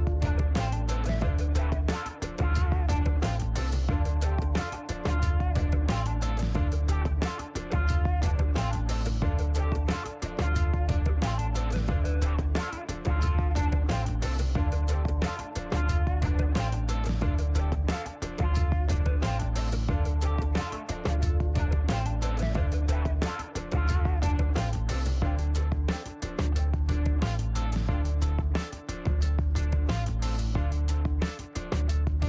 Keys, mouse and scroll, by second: 2.2 click, 3.3 middle click, 4.1 scroll up 1, 5.2 scroll down 1, 5.5 middle click, 6.6 middle click, 9.0 click, 11.9 click, 13.5 click, 14.4 right click, 14.8 scroll up 1, 15.8 click, 17.8 click, 19.6 click, 21.0 click, 22.3 click, 24.3 click, 27.3 click, 28.6 middle click, 28.8 scroll down 1, 29.8 click, 31.1 click, 32.1 scroll up 1.